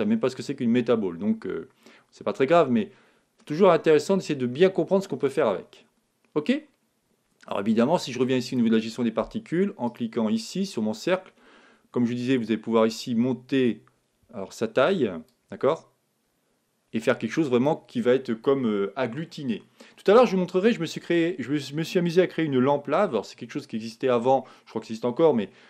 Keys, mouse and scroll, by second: 4.1-5.9 middle drag, 8.4-10.2 drag, 9.8-11.5 right drag, 11.2-13.2 middle drag, 15.2-17.2 drag.